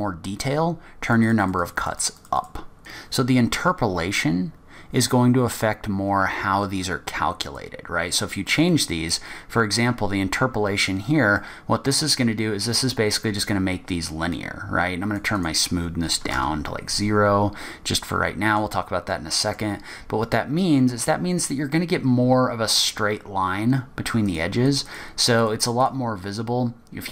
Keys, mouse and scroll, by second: 1.2 click, 1.4 click, 1.6 click, 1.8 click, 2.0 click, 2.2 click, 2.3 click, 2.7 click, 7.6 click, 11.1-11.6 scroll up 3, 11.5 middle click, 14.5 click, 15.5 click, 17.9-18.5 scroll down 2, 18.3 middle click, 19.3 middle click, 20.0-20.8 scroll up 2, 20.8 scroll down 1, 21.8-22.3 scroll up 1, 24.4 click, 24.9 click, 25.0 click, 25.6 click, 25.8 click, 26.0 click.